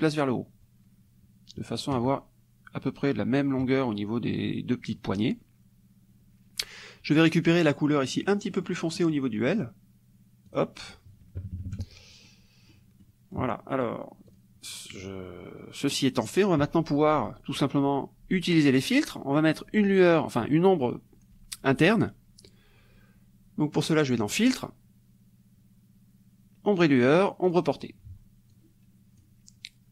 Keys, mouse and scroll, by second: 8.3 middle click, 9.6 middle click, 9.8 click, 10.5 click, 11.4 KP_Subtract, 12.3 click, 13.0 click, 14.3 click, 15.9 click, 24.3 click, 27.5 click, 28.5 click.